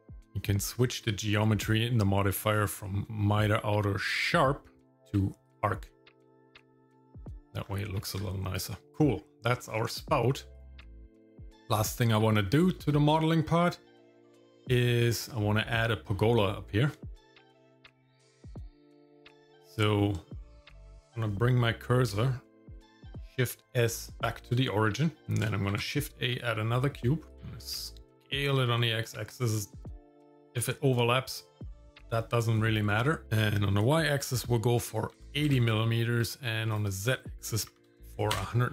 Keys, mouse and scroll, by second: 0.9 click, 2.4-5.8 drag, 6.2 middle click, 6.7-7.2 scroll down 3, 7.2 middle click, 7.6 scroll up 1, 8.0 Tab, 8.9 shift+middle click, 8.9 scroll down 3, 9.6 scroll down 2, 10.5 click, 10.9 shift+middle click, 11.3 middle click, 11.8 shift+middle click, 12.3 middle click, 13.5-14.0 scroll up 1, 17.0 shift+middle click, 23.1 shift+s, 24.6 middle click, 25.7 shift+a, 27.3-30.6 drag, 30.9-32.4 middle drag, 32.5 middle click, 33.4-35.5 drag, 36.7-38.4 drag.